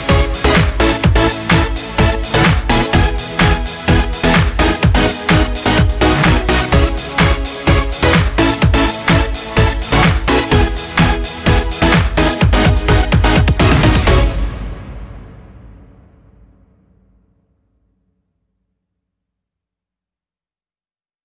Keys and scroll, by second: 1.4 ctrl+t, 5.7 ctrl+z, 10.7 ctrl+t, 15.0-17.2 ctrl+space, 17.7 ctrl+space.